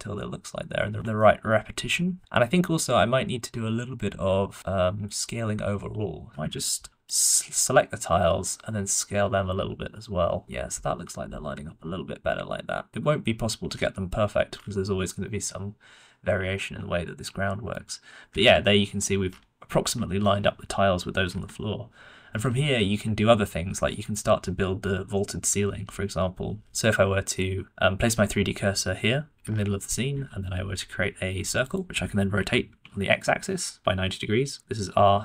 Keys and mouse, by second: 1.1-1.6 shift+middle drag, 5.7 s, 7.0 click, 9.0 s, 15.0-15.3 shift+middle drag, 16.5 shift+middle drag, 17.6 middle click, 18.5-18.9 shift+middle drag, 19.1-20.0 middle drag, 20.2-21.5 shift+middle drag, 21.7 shift+middle click, 22.7 middle click, 26.6 middle click, 29.3 middle click, 30.2 shift+a, 32.3 r.